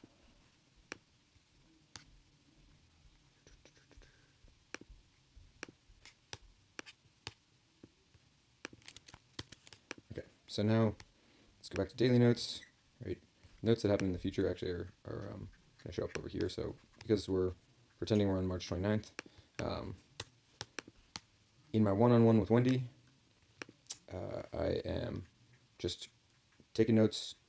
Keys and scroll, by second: 9.3 ctrl+k.